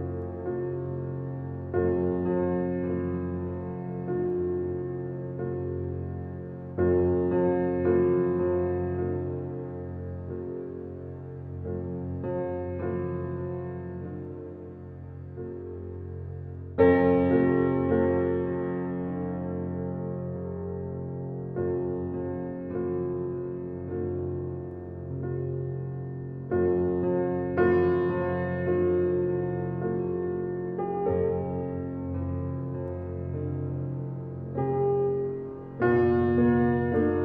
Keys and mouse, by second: 0.3 click, 2.2 f, 2.7 click, 4.2-5.6 drag, 6.1-7.1 drag, 7.6 ctrl+z, 8.8 f, 9.2 click, 10.7 click, 11.3 click, 11.6 click, 12.8-14.1 drag, 14.1 ctrl+z, 15.5 click, 16.9-18.0 drag, 17.9 ctrl+z, 18.9 f, 19.2-21.1 drag, 21.2-21.6 typing, 21.8 Return, 23.3-24.8 drag, 24.6-25.3 typing, 26.1 click, 27.3-29.2 ctrl+alt+drag, 29.6-30.4 typing, 30.0-35.5 drag, 36.3 click.